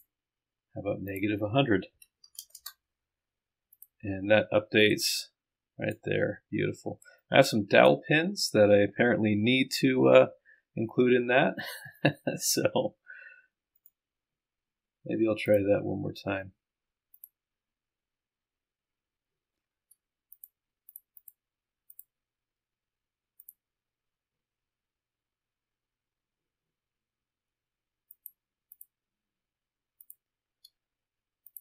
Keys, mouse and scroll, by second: 1.1 click, 2.2 KP_Subtract, 3.0 KP_0, 3.8 click, 4.1 right click, 13.8 click, 15.5 click, 17.2 click, 20.3-21.7 drag, 21.9 click, 23.4 click, 28.1 click, 28.8 click, 30.1 click, 31.5 click.